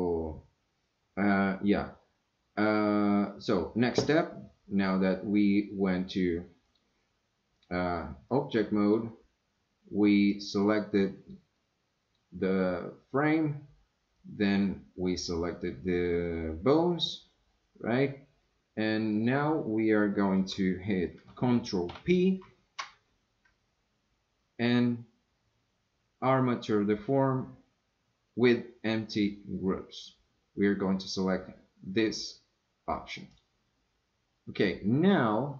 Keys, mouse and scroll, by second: 6.7 drag, 7.6 click, 8.3 click, 10.9 click, 11.6 click, 14.1 click, 15.1 click, 21.9 ctrl+p.